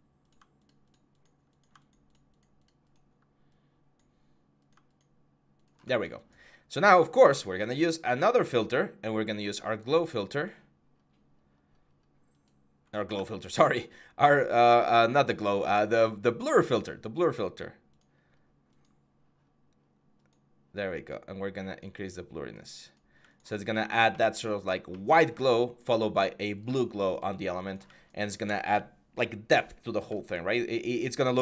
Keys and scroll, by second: 12.9 ctrl+z.